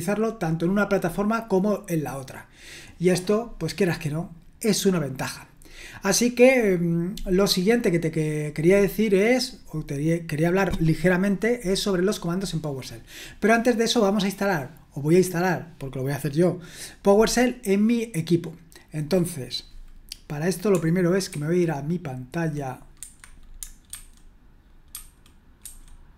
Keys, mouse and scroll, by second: 7.9-9.4 scroll down 1, 21.3 super+1, 23.0 Escape, 23.9 super+1, 25.1 super+2, 25.6 super+1.